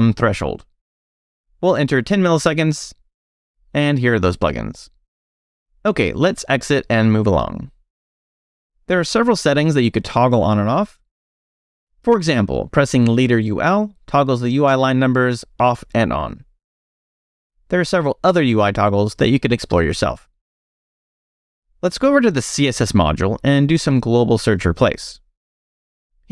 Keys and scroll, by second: 0.0 ctrl+f, 2.5-3.5 typing, 7.8 q, 11.7 space, 12.4 u, 13.8-16.1 typing, 22.1-22.9 typing, 24.1-25.1 typing.